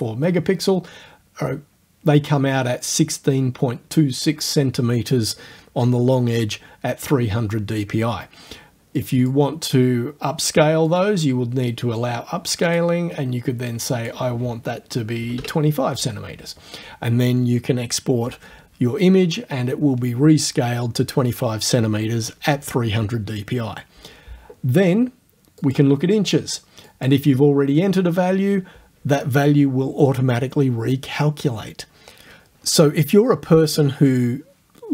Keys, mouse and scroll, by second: 9.0 click, 10.9 click, 12.7 click, 13.7 click, 15.2 KP_2, 15.4 KP_5, 25.6 click, 26.9 click.